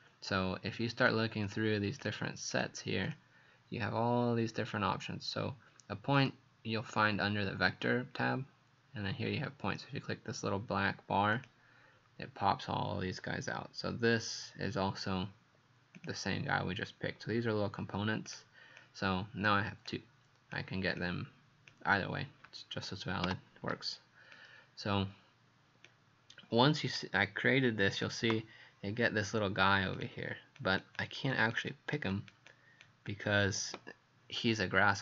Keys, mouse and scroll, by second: 1.5 click, 2.5 click, 3.1 click, 6.2 click, 18.8 click, 19.9 click, 23.3 Delete, 24.3 click, 30.6 click, 31.3 click, 31.7 click, 32.5 click, 33.1 click.